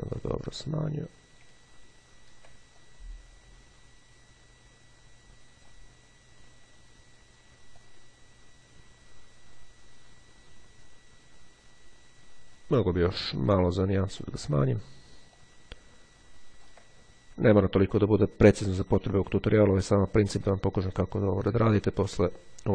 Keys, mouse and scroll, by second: 0.5-1.8 drag, 1.8-2.7 ctrl+scroll up 2, 2.9-6.3 ctrl+drag, 7.7-13.5 drag, 14.4 click, 15.5-17.3 ctrl+drag, 17.6 click, 19.3 click, 20.1-22.7 drag.